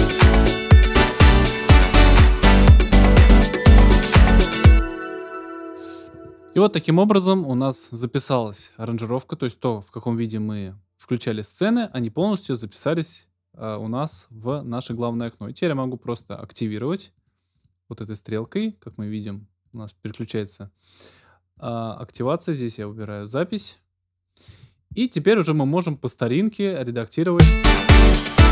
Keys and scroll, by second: 4.6 space, 27.3 space.